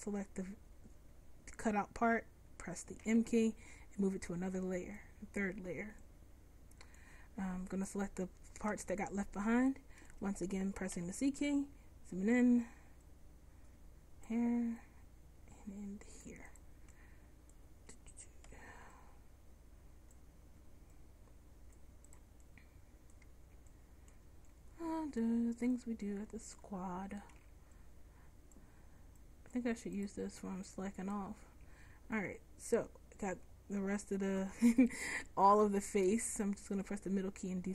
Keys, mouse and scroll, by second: 0.0 right click, 1.5-4.8 middle drag, 3.1 m, 6.9 right click, 7.9 right click, 8.8 Tab, 11.0 c, 18.6 c, 21.8 middle click, 23.8 middle click, 24.6 middle click, 27.5 c, 31.7 c, 35.9 c.